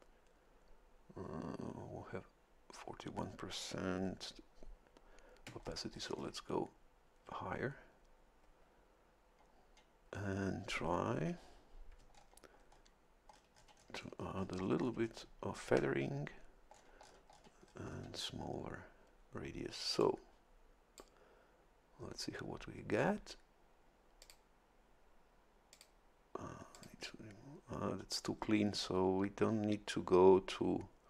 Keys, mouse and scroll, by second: 5.6 ctrl+scroll up 1, 12.1-12.9 shift+scroll down 3, 13.3-14.3 shift+scroll up 2, 14.3-15.3 shift+scroll up 1, 16.7 scroll down 2, 17.6-18.1 scroll up 2, 20.0-21.2 drag, 24.2 click, 25.7 click, 26.7 click.